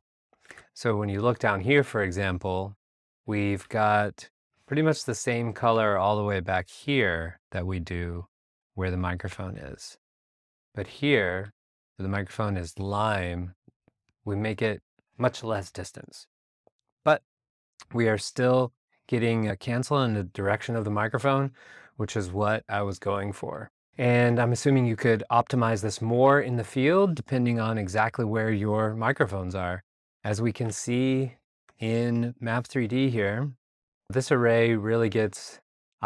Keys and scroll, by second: 3.6 r, 30.6 alt+super+Tab, 31.3 super+Tab.